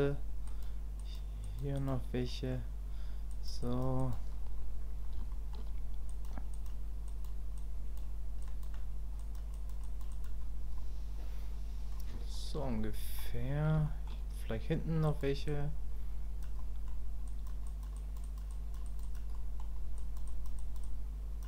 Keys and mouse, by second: 0.5 click, 1.0 click, 1.4 click, 1.7 click, 2.3 middle click, 3.3 click, 3.6 click, 4.0 click, 5.3 shift+click, 6.1 click, 6.5 click, 7.1 click, 7.6 click, 8.5 click, 9.2 click, 9.5 click, 9.8 click, 10.1 click, 10.8-11.9 middle drag, 12.3 shift+click, 12.8 middle click, 13.8 shift+middle click, 15.1 click, 15.5 click, 16.6 middle click, 17.3 click, 17.7 click, 17.9 click, 18.2 click, 18.5 click, 18.8 click, 19.0 click, 19.3 click, 20.0 click, 20.3 click, 20.6 click, 20.8 click.